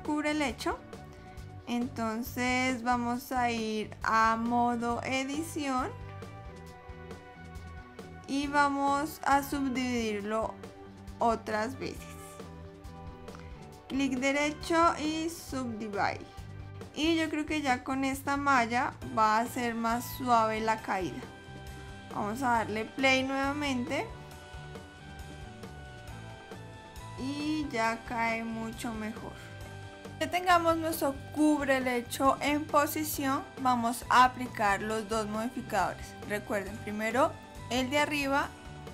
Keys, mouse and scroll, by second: 3.0 click, 11.7 right click, 14.1 right click, 18.4 click, 21.2 middle click, 25.0 click, 30.7 click, 32.4 click, 36.9 click.